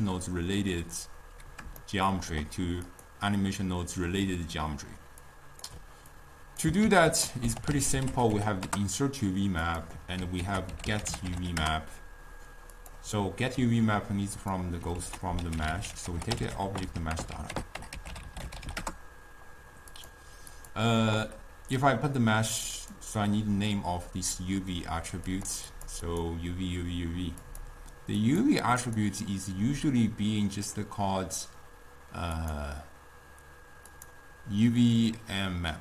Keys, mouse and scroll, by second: 2.0-3.1 shift+middle drag, 3.1 click, 9.1 ctrl+a, 12.0 ctrl+a, 14.6 click, 19.2 BackSpace, 23.4-35.8 drag.